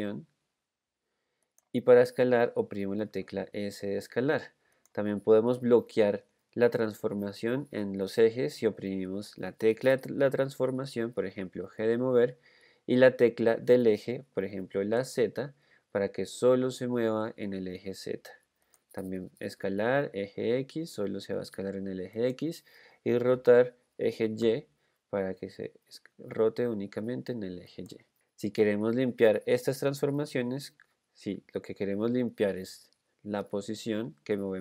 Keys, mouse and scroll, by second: 3.4 s, 12.2 g, 19.8 s, 23.7 r, 31.6 g.